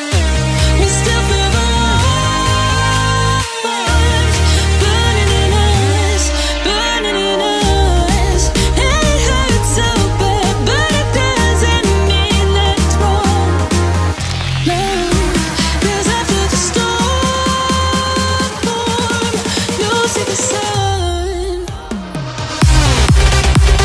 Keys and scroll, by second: 11.6 ctrl+j, 20.8 ctrl+t.